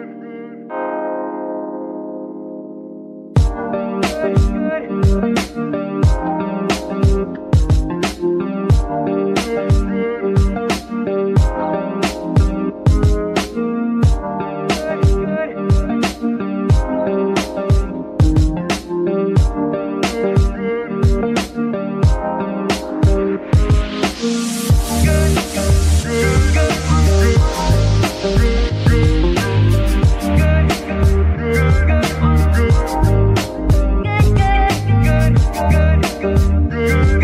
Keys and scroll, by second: 2.3 KP_3, 4.5 ctrl+r, 19.2 g, 21.5 Tab, 22.5 a, 23.8 s, 25.2 Tab, 25.8 s, 29.4 KP_3, 31.4 g, 31.5 y.